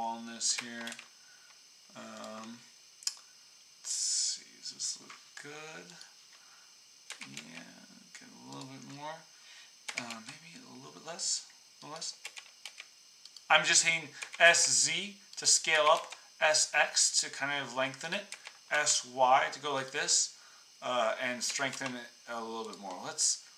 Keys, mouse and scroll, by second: 0.5 s, 3.1 click, 4.4-5.9 middle drag, 7.0 s, 8.8 click, 9.8-20.2 s, 21.4 s.